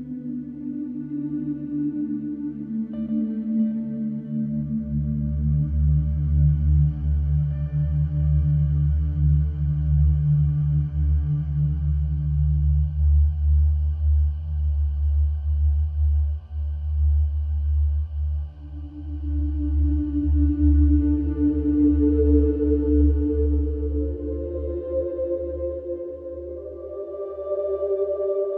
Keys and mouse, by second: 0.2-4.0 middle drag, 4.9-6.0 middle drag, 7.1-9.1 middle drag, 11.4 middle click, 11.6 middle click, 12.1-13.7 middle drag, 13.7-14.4 drag, 14.4 ctrl+l, 14.8 middle click, 15.2 middle click, 16.9 middle click, 17.9-21.0 middle drag, 22.4 r, 22.9 z.